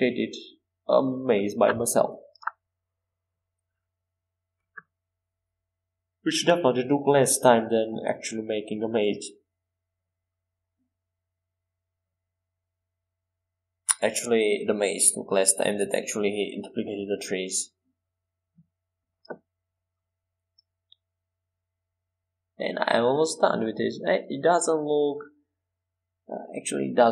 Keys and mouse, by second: 0.4 e, 2.7 e, 3.2 s, 4.3 e, 6.5 e, 7.5 s, 8.8 e, 10.7 e, 12.0 s, 13.5 e, 15.3 e, 16.2 s, 17.8 e, 20.2 e, 20.8 s, 22.9 e, 25.6 e, 26.5 s.